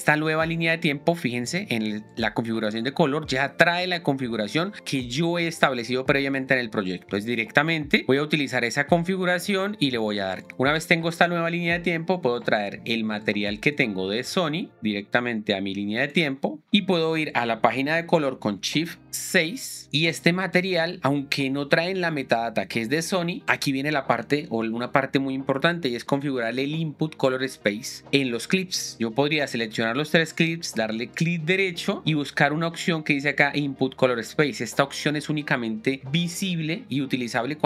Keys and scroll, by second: 19.3 shift+6.